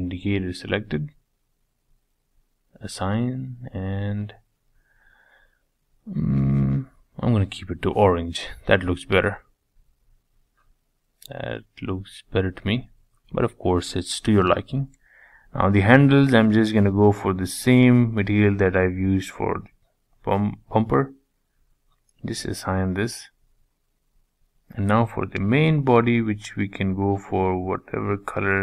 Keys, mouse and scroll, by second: 1.0 click, 1.9-2.6 drag, 2.6-4.3 middle drag, 4.3 click, 7.8 scroll down 2, 8.0-9.8 middle drag, 9.8-10.2 scroll down 2, 10.2-12.7 middle drag, 12.7 click, 13.1-15.0 middle drag, 15.2 shift+click, 15.7-17.7 middle drag, 19.9 click, 20.5 click, 21.3 scroll down 1, 21.4-23.3 middle drag, 23.4-24.0 scroll up 2, 24.0 click, 25.3-27.1 drag.